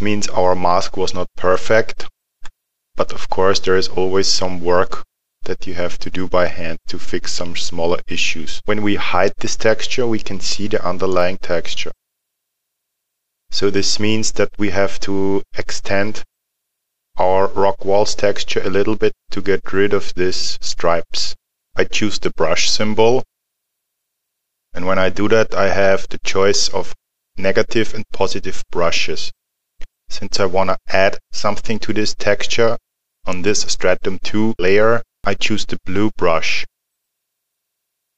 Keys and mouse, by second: 11.0 click, 22.6 click, 36.9 click.